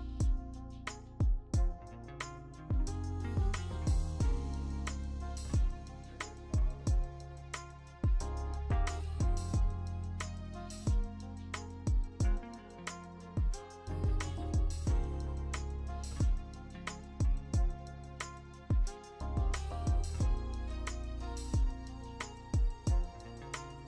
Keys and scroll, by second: 4.4 BackSpace, 7.0 ctrl+c, 7.4 ctrl+v, 7.9 v, 9.1 ctrl+t, 11.6 v, 12.1 v, 13.2 v, 14.9 ctrl+alt+g, 15.5 ctrl+g, 16.7-17.7 typing, 21.9 ctrl+alt+g.